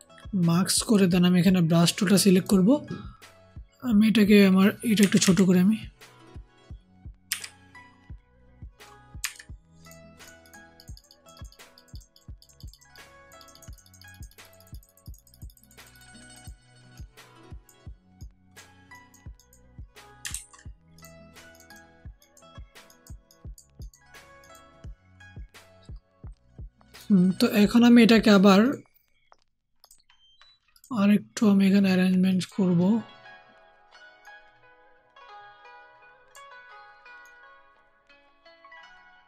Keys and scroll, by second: 4.9 [, 5.1 [, 7.2 [, 9.1 ], 20.2 ctrl+z.